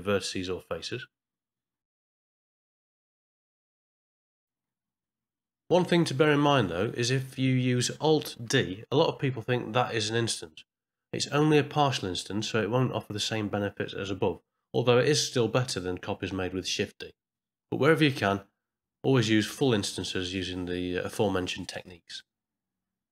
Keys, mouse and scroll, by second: 0.4 shift+middle click, 1.4 click, 1.7 middle click, 2.6 ctrl+middle click, 3.7 shift+middle click, 6.7 alt+g, 6.7 middle click, 7.2 shift+middle click, 7.7 middle click, 9.1 alt+d, 11.0-12.1 middle drag, 12.7-13.8 typing, 14.2-15.8 middle drag, 16.3 click, 17.2 shift+d, 18.6 middle click, 21.7 middle click.